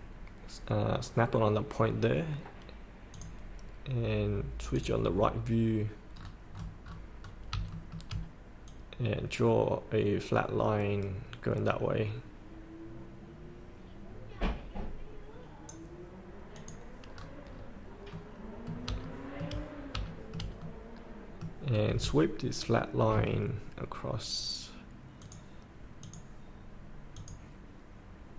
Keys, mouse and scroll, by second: 3.1 click, 6.1 scroll down 1, 7.7 shift+middle click, 7.9 shift+middle click, 8.7-13.9 drag, 14.0 click, 15.0 click, 17.2 scroll up 1, 18.1 middle click, 18.6 scroll up 1, 19.0 shift+middle click, 19.7 scroll up 1, 20.0 shift+middle click, 21.7 scroll down 1, 25.2 click, 26.3-28.2 drag.